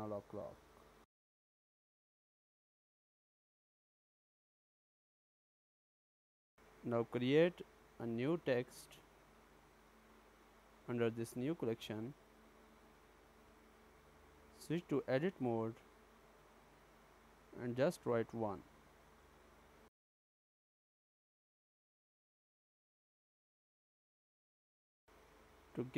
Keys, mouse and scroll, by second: 0.0 BackSpace, 0.1 BackSpace, 4.4 click, 4.4 right click, 5.9 shift+a, 11.9-12.8 scroll up 4, 13.0 shift+middle click, 13.9-14.6 scroll up 2, 14.6 Tab, 15.7-16.2 BackSpace, 16.6 1, 18.9 Tab, 21.0 shift+middle click, 22.0 middle click, 23.0-23.3 scroll up 6, 23.5 shift+middle click, 24.7 click.